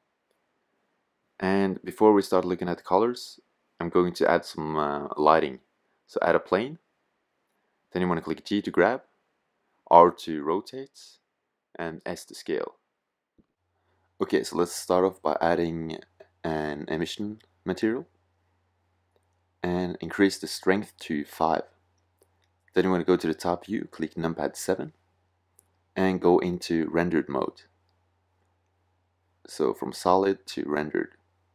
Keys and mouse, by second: 4.8-5.9 drag, 6.7-8.0 middle drag, 8.0 g, 9.3-11.0 drag, 10.0 r, 11.1 click, 11.8 s, 17.4 click, 19.8-21.6 drag, 23.7 KP_7.